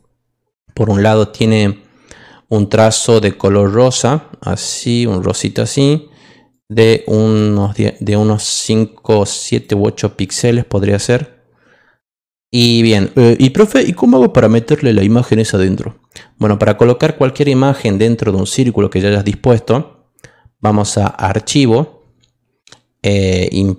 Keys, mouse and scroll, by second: 3.6 click, 5.2 click, 6.5 click, 6.9 click, 7.2 click, 7.5 click, 8.0 click, 8.3 click, 9.0 click, 9.5 click, 10.2 click, 21.0 click.